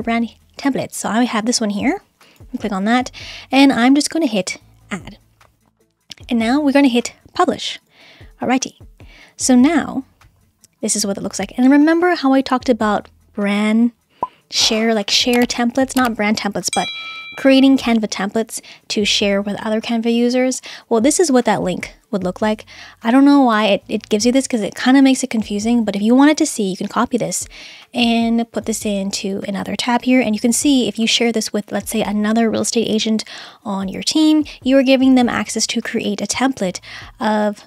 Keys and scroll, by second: 30.1 Return.